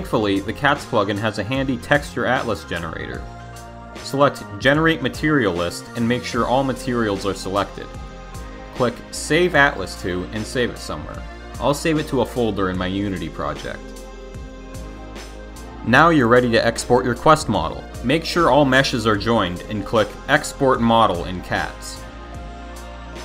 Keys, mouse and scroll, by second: 6.2 click, 6.7 click, 7.3 click, 11.2 click, 16.7 click, 19.4 click.